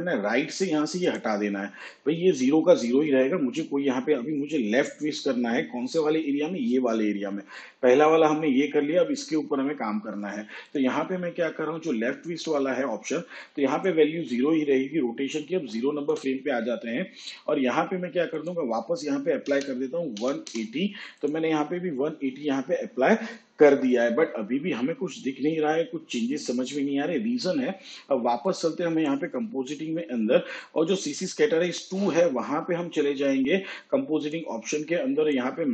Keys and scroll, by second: 19.5 1, 20.2 8.